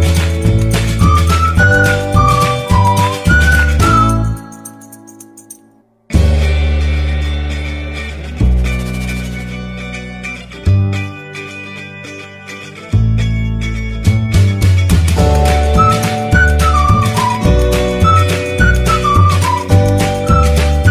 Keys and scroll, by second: 0.6 ctrl+b, 1.2 a, 1.4 ctrl+z, 1.6 ctrl+z, 1.9 ctrl+b, 2.7 a, 4.0 1, 7.9 e, 12.4 ctrl+b, 12.9 a, 14.7 ctrl+b, 15.9-18.0 typing, 19.2 ctrl+r, 19.7 ctrl+r, 20.2 ctrl+r.